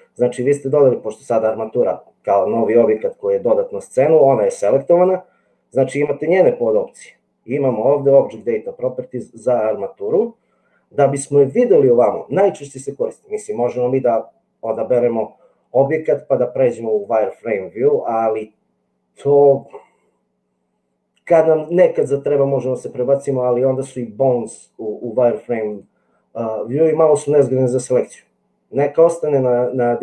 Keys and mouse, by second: 12.8-13.8 middle drag.